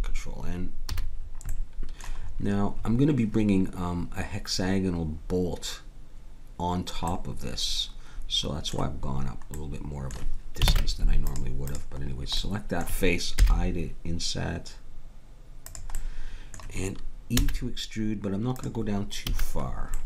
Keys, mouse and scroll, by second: 0.9 a, 10.7 ctrl+Tab, 11.7-13.5 drag, 13.4 i, 17.4 e, 19.3 a.